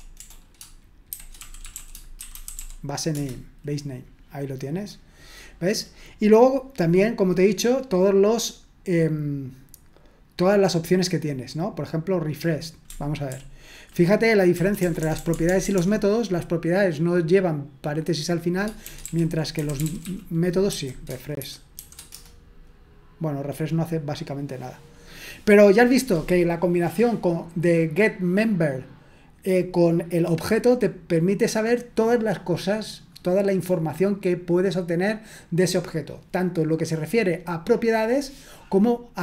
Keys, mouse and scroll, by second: 0.9-3.1 typing, 3.1 Return, 7.8-8.6 scroll up 1, 8.6-9.4 scroll up 1, 13.3 ctrl+p, 14.6 BackSpace, 14.8 BackSpace, 15.0 BackSpace, 15.2 BackSpace, 16.9-18.7 scroll up 1, 18.7-19.6 scroll up 1, 19.4-22.1 typing.